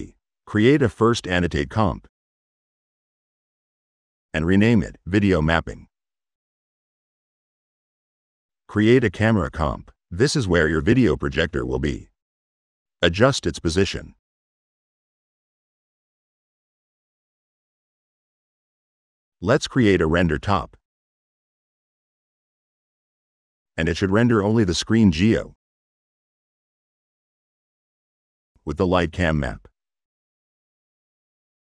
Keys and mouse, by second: 0.5 click, 0.7 Tab, 1.4 click, 3.2 click, 3.7 click, 4.6 click, 5.0-6.1 typing, 7.6 drag, 8.1 click, 8.5 click, 8.8 click, 8.9 Tab, 10.0 click, 11.0 click, 11.8 click, 12.3-12.9 middle drag, 12.9 click, 13.2 click, 13.8 right click, 14.4 click, 14.8 middle click, 15.3 right click, 15.8 middle click, 16.9 click, 17.6 middle click, 17.9 click, 18.7 r, 19.9 click, 21.9 click, 24.0 click, 27.8 click.